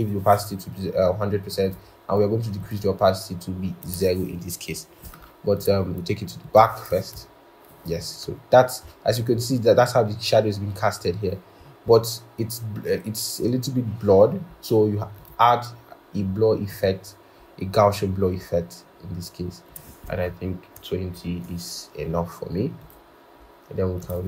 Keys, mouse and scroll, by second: 7.0 ctrl+[, 8.7-9.2 scroll, 20.2 Down, 21.1 shift+Down.